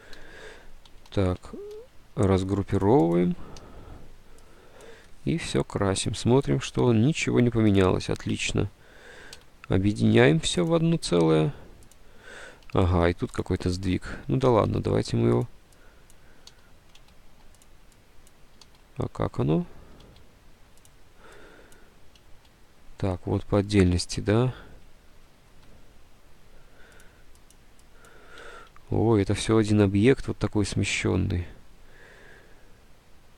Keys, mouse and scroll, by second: 0.2 Delete, 0.3 ctrl+u, 1.1 ctrl+z, 1.2 ctrl+u, 1.8 ctrl+u, 1.8 ctrl+u, 3.7 Delete, 9.5 d, 12.9 d, 13.7 click, 14.8 ctrl+z, 16.5 ctrl+z, 17.1 ctrl+z, 18.7 ctrl+z, 20.2 ctrl+z, 22.7 ctrl+z, 24.4 k, 25.4 ctrl+z, 28.8 ctrl+z.